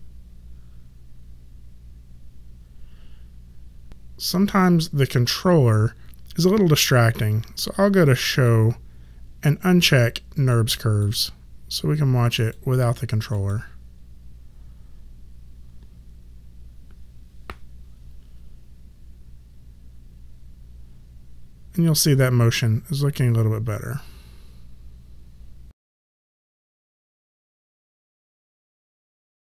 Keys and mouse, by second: 8.2 click, 10.5 click.